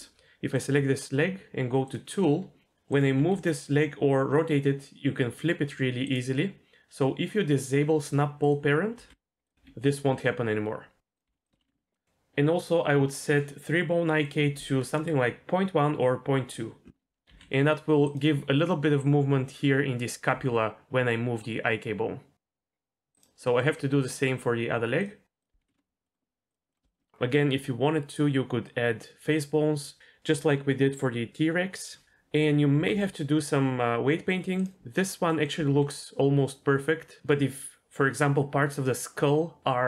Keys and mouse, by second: 2.6 g, 3.2 r, 8.4 click, 9.0 g, 9.6 r, 11.3 g, 11.6 alt+r, 14.3-16.9 drag, 17.2 g, 20.3 g, 23.4 middle click, 24.0 click, 25.4 click, 26.0 middle click, 26.7-27.1 shift+middle drag, 32.3 click, 32.8 r, 33.0 r, 34.6-34.9 drag, 35.3 middle drag, 35.6 r, 35.8 r.